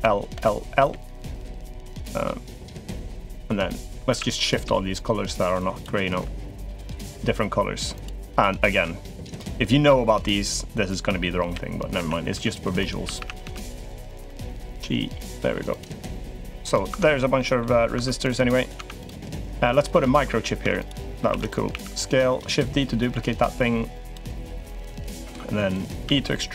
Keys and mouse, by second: 0.1 l, 0.6 l, 3.6 a, 3.7 a, 4.3 b, 5.9 g, 9.1 click, 9.4-13.9 typing, 15.9 click, 16.5 click, 16.7 Tab, 17.1 click, 17.7 Tab, 18.5 Tab, 18.8 click, 19.4 click, 19.8 click, 20.1 middle click, 20.4 Tab, 20.6 click, 21.1 shift+d, 21.5 s, 23.2 click, 24.6 click, 25.8 e.